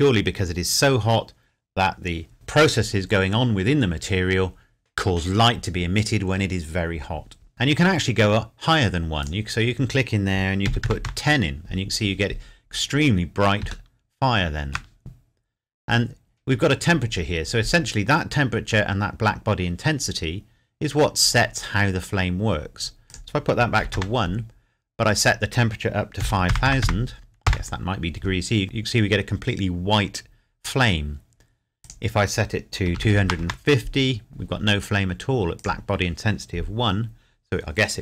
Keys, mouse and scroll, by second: 9.2 click, 10.7 KP_1, 10.9 KP_0, 11.1 KP_Enter, 12.7 scroll up 1, 12.9 scroll down 1, 13.9 shift+middle click, 23.1 click, 23.8 KP_1, 23.9 KP_Enter, 25.2 click, 26.2 KP_5, 26.5 KP_0, 27.5 KP_Enter, 31.8 click, 32.9 KP_2, 33.4 KP_Enter, 35.6 click.